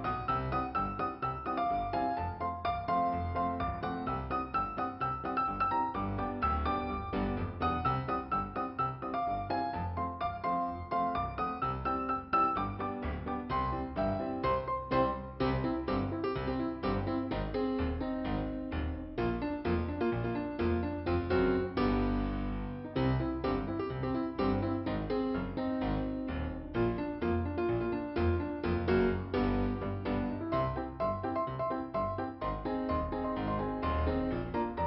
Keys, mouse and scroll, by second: 1.3 click, 9.2 scroll up 1, 10.8 scroll up 1, 13.0 click, 15.1 click, 18.1 click, 20.4 click, 21.3 click, 21.5 click, 23.0 click, 33.2 click, 33.9 click.